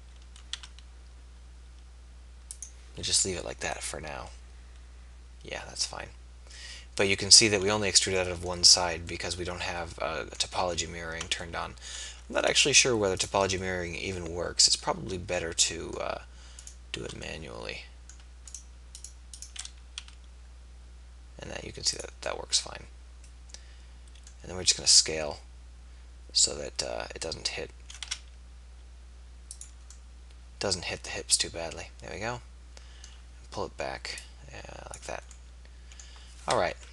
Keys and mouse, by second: 0.9 e, 10.7 ctrl+z, 12.1 ctrl+z, 20.1 e, 24.7 s, 30.1-31.1 middle drag, 34.2-36.0 drag, 36.8 KP_3.